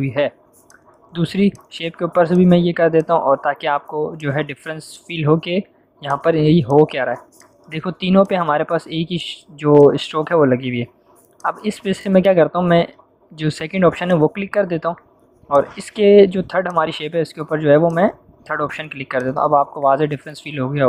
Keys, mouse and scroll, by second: 14.0 click.